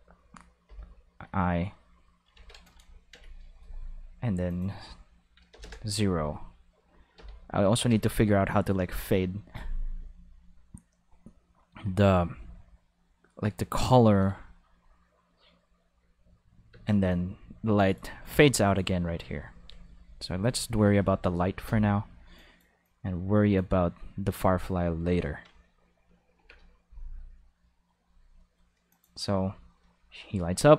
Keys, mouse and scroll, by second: 0.6 5, 2.3 ctrl+5, 4.5 click, 5.5 g, 5.6 Return, 5.7 5, 7.2 5, 7.8 ctrl+5, 8.9 right click, 14.3 space, 14.4 5, 16.7 space, 16.8 5, 17.1-17.9 drag, 21.6 5, 22.4 click, 22.8 click, 28.9 click, 29.3 space, 29.4 5.